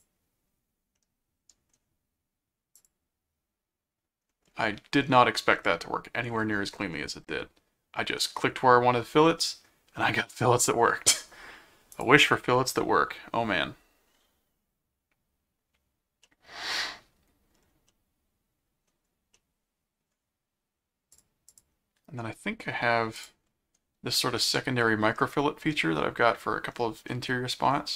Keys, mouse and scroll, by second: 0.9 middle click, 2.8 click, 7.5 scroll down 2, 8.2-9.6 middle drag, 11.9 click, 16.2 middle click, 17.8-18.8 middle drag, 19.4 middle click, 21.1 click, 23.1 click, 25.2 middle click, 25.8-26.3 scroll up 4, 27.0 middle click.